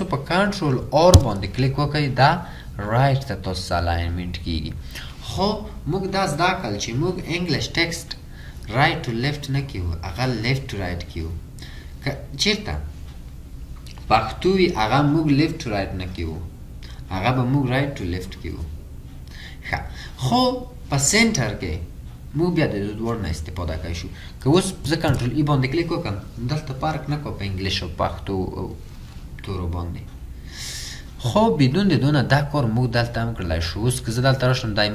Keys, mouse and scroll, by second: 1.2 ctrl+r.